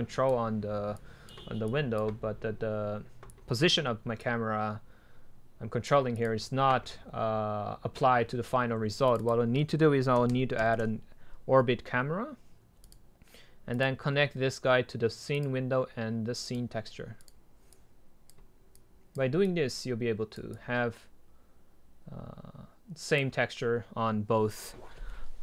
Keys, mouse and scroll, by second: 4.9-8.3 drag, 9.3-11.4 drag, 13.1-16.5 drag, 21.0 click, 21.2 drag.